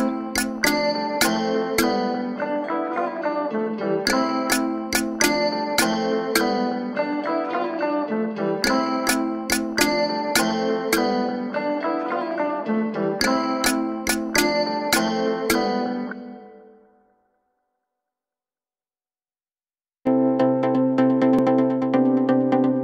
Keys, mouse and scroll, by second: 1.5-2.2 scroll up 1, 2.2 scroll down 1, 2.8 scroll up 1, 3.5 Tab, 4.6 z, 6.2 z, 6.6 Tab, 7.9 shift+middle click, 8.6 Tab, 9.5 z, 10.4 z, 11.1-12.2 shift+middle drag, 12.2 z, 13.2 click, 14.8 z, 15.4 scroll up 1, 15.6 s, 18.4 Tab, 18.8-19.4 scroll down 1, 19.4 Tab, 19.8 s, 20.9 Tab, 21.1-21.6 scroll down 1, 21.6 click, 22.0-22.4 shift+middle drag, 22.4-22.7 scroll up 1, 22.7 click.